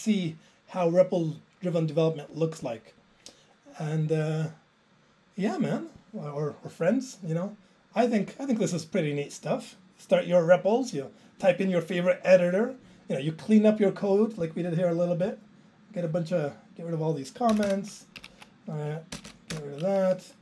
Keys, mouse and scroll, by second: 15.3 click, 17.1 click, 17.6 BackSpace, 17.6 BackSpace, 18.3 Down, 18.4 Right, 19.2 ctrl+k, 19.3 ctrl+k, 19.5 BackSpace.